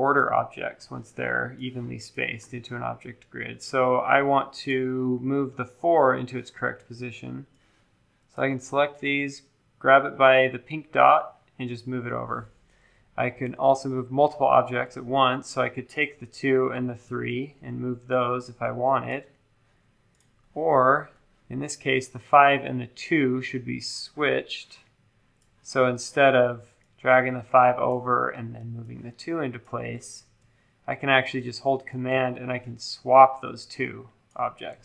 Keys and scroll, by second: 13.3 super+z, 29.9 super+z, 30.1 super+z.